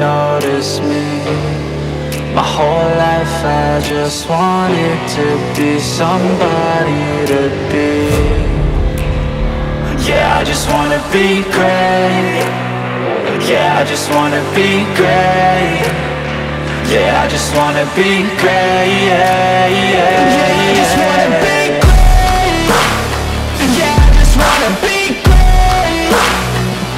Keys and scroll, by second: 0.3 F3, 2.0 shift+Page_Up, 8.0 Escape, 9.8 F2, 13.3 F3, 18.0 space, 20.3 F3, 21.1 Escape, 24.2 0, 24.4 Return.